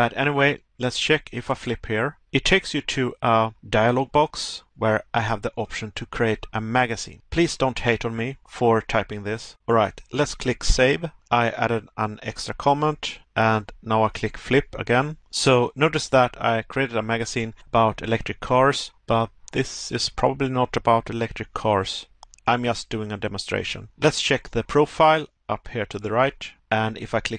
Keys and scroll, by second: 2.7 Pause, 4.1 Pause, 8.3 Pause, 11.2 Pause, 18.7 Pause, 21.7 Pause, 23.7 Pause, 26.4 Pause.